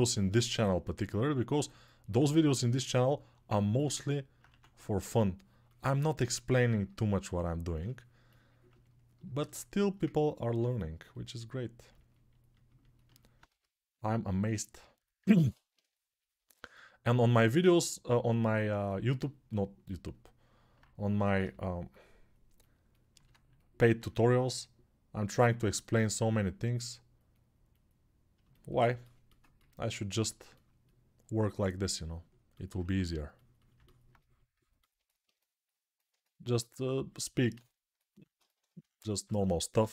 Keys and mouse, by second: 4.3 1, 13.2 g, 15.4-18.6 shift+right drag, 21.2 g, 29.2-37.1 ctrl+alt+drag, 32.6 1, 39.0 1, 39.5 [.